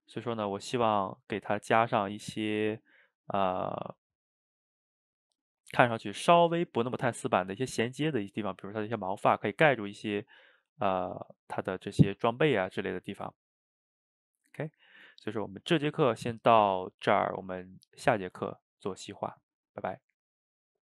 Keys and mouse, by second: 0.8 shift+right click, 1.1-2.4 ctrl+middle drag, 2.4 shift+right click, 2.8-6.3 ctrl+middle drag, 8.5-20.6 ctrl+middle drag.